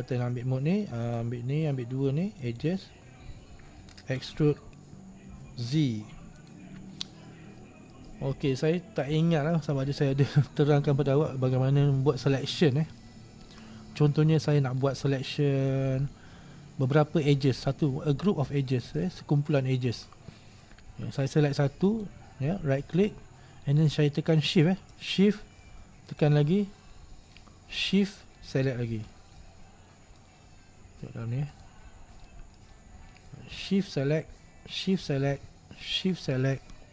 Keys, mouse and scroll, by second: 1.2 right click, 2.5-4.3 shift+right drag, 4.3 e, 7.2-8.2 middle drag, 8.2-8.6 scroll down 3, 8.6-9.6 middle drag, 9.6-10.1 scroll up 2, 10.1-10.7 scroll up 1, 10.7-11.5 scroll up 1, 11.5-12.0 scroll up 2, 12.0-12.4 scroll down 2, 12.4-14.0 middle drag, 14.0-14.6 scroll up 1, 14.6-15.0 scroll down 2, 15.0-17.6 middle drag, 17.6-18.1 scroll up 2, 19.2-22.0 shift+middle drag, 22.0-26.3 right drag, 28.5-29.5 shift+right drag, 29.5-31.6 middle drag, 31.6 click, 32.4-33.9 middle drag, 33.9 shift+right click, 35.0 shift+right click, 36.1 shift+right click.